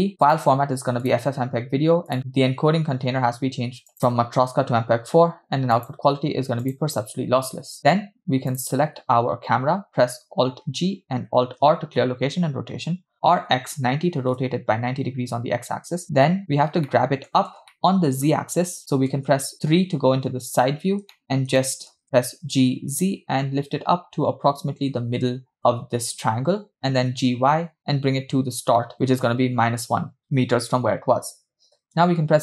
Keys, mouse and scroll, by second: 0.0 scroll down 4, 0.2-1.2 drag, 1.6-2.1 scroll down 2, 2.1 click, 3.9-5.0 drag, 5.8-6.9 drag, 8.6-9.3 drag, 10.7 alt+g, 11.7 alt+r, 13.3 r, 16.5-16.8 scroll up 2, 16.9 middle click, 17.7-18.3 shift+middle drag, 19.4 KP_1, 19.5 KP_3, 20.7-21.5 scroll up 4, 21.1 shift+middle click, 21.7 shift+middle drag, 22.9 g, 27.0 g, 32.0 KP_0.